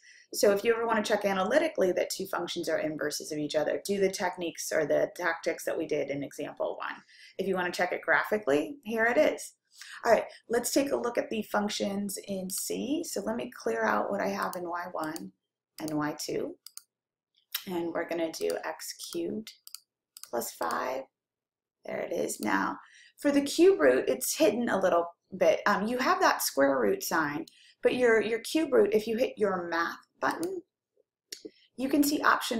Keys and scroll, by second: 15.2 Down, 16.9 Up, 19.3 ^, 20.0 3, 21.4 5, 22.4 Return.